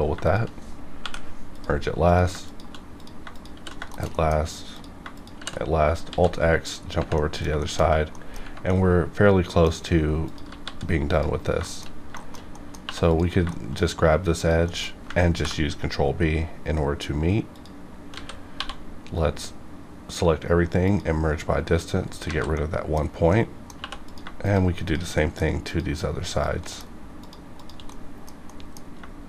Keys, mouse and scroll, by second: 0.2 shift+click, 0.9 m, 1.4 click, 2.4 shift+click, 2.9 click, 3.3 shift+click, 3.5 shift+r, 4.1 middle click, 4.7 click, 5.1 shift+click, 5.3 shift+r, 5.6 scroll down 2, 6.1 alt+x, 6.7 scroll down 1, 7.1 middle click, 7.6 shift+middle click, 7.8 scroll up 1, 8.1 middle click, 8.6 middle click, 9.7 scroll up 1, 10.2 click, 10.4 g, 10.6 g, 11.1 click, 11.3 scroll down 1, 11.7-12.1 shift+middle drag, 12.1 shift+middle click, 12.8 2, 13.0 click, 13.5 shift+middle click, 13.7 scroll up 2, 14.4 shift+click, 14.6 shift+middle click, 14.8 shift+scroll up 2, 15.3 ctrl+b, 17.4 click, 17.5 click, 18.1-18.5 typing, 19.0 right click, 20.7 click, 22.0-22.5 scroll down 2, 22.3 alt+a, 22.5 middle click, 23.0-23.3 scroll up 1, 23.8 2, 24.0 click, 24.4 shift+click, 24.5 shift+click, 25.1 shift+middle click, 25.7 shift+click, 26.6 shift+middle click, 27.2 shift+click, 27.3 shift+click, 27.9 middle click, 28.4 middle click, 28.8 scroll up 1.